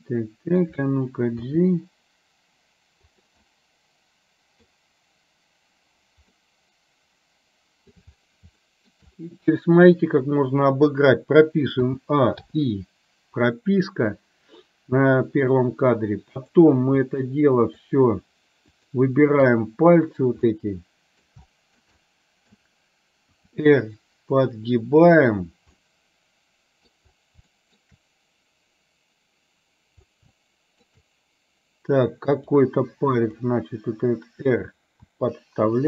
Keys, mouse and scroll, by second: 1.4 g, 3.4-4.7 middle drag, 6.4-7.9 middle drag, 6.4 scroll up 1, 7.9 scroll down 1, 8.8 shift+middle click, 11.9 a, 12.5 i, 16.4 click, 18.8 shift+click, 20.4 middle click, 21.5 shift+middle click, 22.0 middle click, 23.4 r, 25.8-26.9 middle drag, 27.6 shift+middle click, 30.4 shift+middle click, 32.4 click, 33.4 click, 35.2 r.